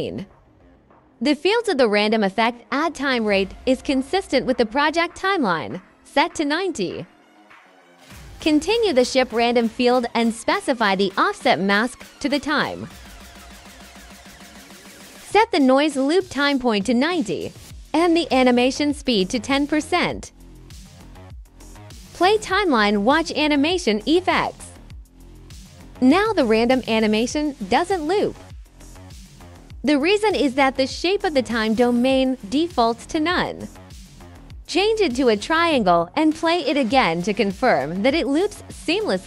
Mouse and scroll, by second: 0.7-2.6 drag, 3.6 click, 5.3 click, 6.8 click, 8.1 click, 8.8 click, 15.2 click, 16.8 click, 18.3 click, 19.7 click, 20.6 click, 21.4 click, 25.5 click, 28.1 click, 31.1 click, 32.1 click, 33.2 click, 35.6 click, 36.3 click.